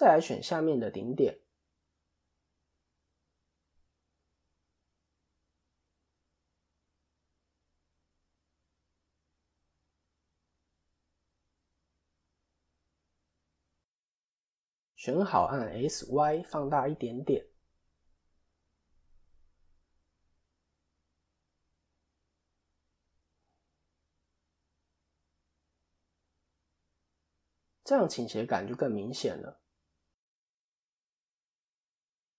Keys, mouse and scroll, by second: 0.2 click, 2.6 ctrl+click, 3.1 middle click, 4.1 scroll down 1, 4.3 middle click, 7.5 shift+click, 11.3 ctrl+shift+click, 13.5 KP_7, 15.8 s, 26.0 KP_3, 26.8-28.2 scroll up 1, 28.2-28.9 scroll down 2, 30.6 click.